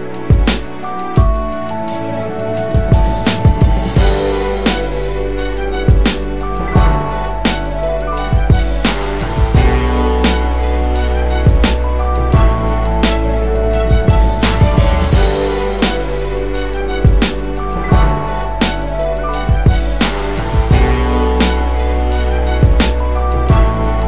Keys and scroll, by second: 13.8 BackSpace.